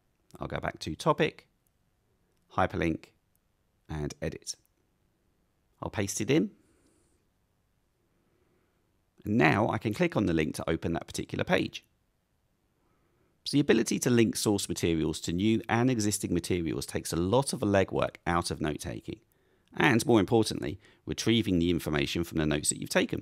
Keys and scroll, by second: 6.1 super+v, 7.6 Return.